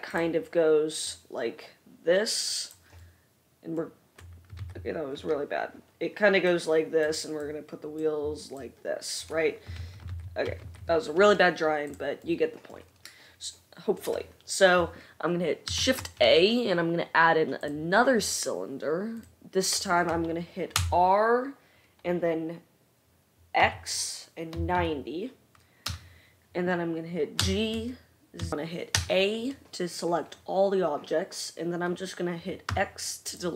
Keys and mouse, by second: 4.8 ctrl+z, 10.0 ctrl+z, 10.3 ctrl+z, 10.8 ctrl+z, 11.0-16.9 middle drag, 16.1 shift+a, 16.9-19.0 drag, 19.0 middle click, 19.3-24.0 drag, 20.9 r, 27.6 g, 28.3-33.5 right drag.